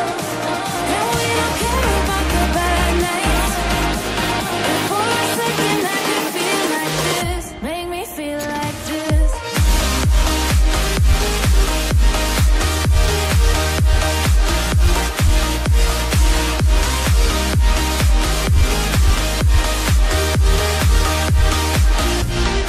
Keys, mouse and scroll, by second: 12.8 double click, 15.9 double click, 16.8 click, 21.1 double click, 21.6 click.